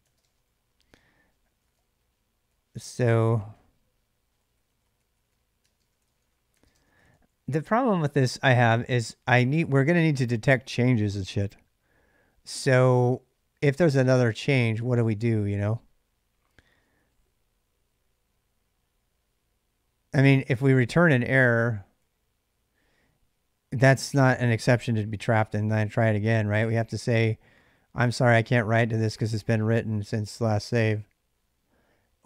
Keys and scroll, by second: 0.0-7.4 typing, 20.6 ctrl+[, 20.8 k, 20.9 k, 21.8-22.5 h.